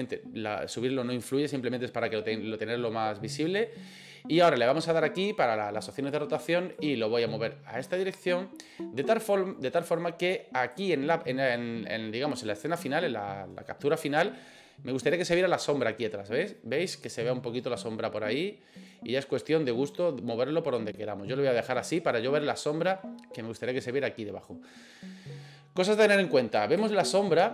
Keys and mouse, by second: 3.6 click, 6.8-10.8 drag, 17.1-21.9 drag, 26.9-27.2 shift+middle drag.